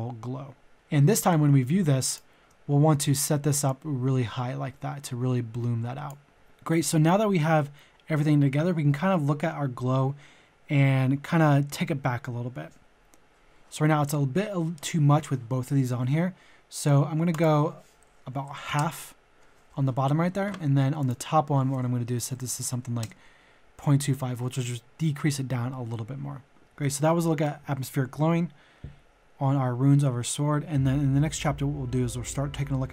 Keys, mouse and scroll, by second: 1.1 ctrl+shift+click, 2.0-6.3 ctrl+shift+drag, 6.3 ctrl+z, 17.2 click, 18.3 KP_Decimal, 18.4 KP_5, 21.0 click, 22.3 KP_2, 22.5 KP_5.